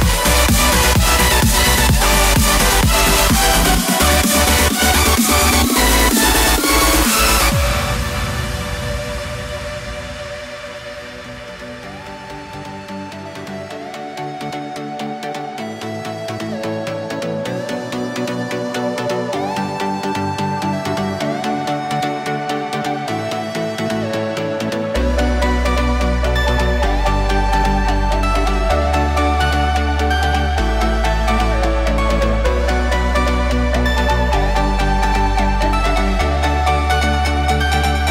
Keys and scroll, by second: 16.2 shift+b, 17.2 alt+b, 23.3 w.